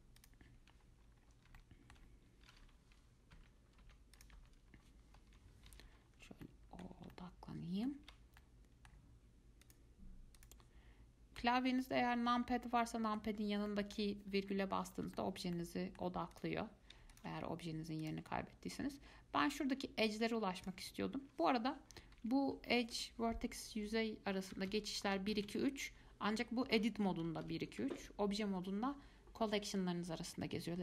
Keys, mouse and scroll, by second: 0.4 click, 1.1-1.8 scroll up 4, 1.8 alt+middle click, 3.5 ., 5.4 KP_Decimal, 6.1-6.6 scroll down 2, 6.6 alt+middle click, 7.3-9.8 shift+middle drag, 9.8 click, 10.6 click, 11.6 KP_Decimal, 12.2-12.6 scroll down 4, 12.6 scroll up 2, 13.0 middle click, 13.5-13.9 scroll down 2, 13.9 middle click, 14.5-14.8 scroll down 2, 15.4-16.5 shift+middle drag, 16.5 click, 17.3 alt+click, 18.2 click, 20.8 click, 22.2 1, 22.3 2, 22.7 3, 23.8-25.7 typing, 27.1-28.7 typing.